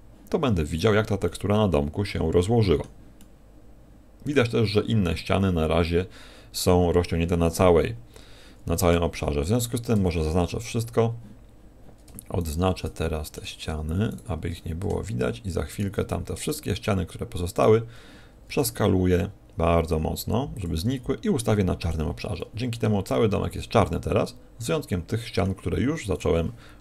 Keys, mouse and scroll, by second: 0.4-0.8 scroll up 5, 1.2 middle click, 3.1 middle click, 8.9 Tab, 9.5 a, 9.9 a, 10.3 scroll down 5, 10.9-11.7 scroll up 1, 12.3 shift+right click, 12.9 middle click, 14.1 shift+right click, 14.5 middle click, 15.7 shift+right click, 16.0 middle click, 17.5 shift+right click, 18.5 s, 20.8 click, 20.8 g, 21.9 click, 22.2 click, 22.3 middle click, 23.1 middle click, 26.1 right click.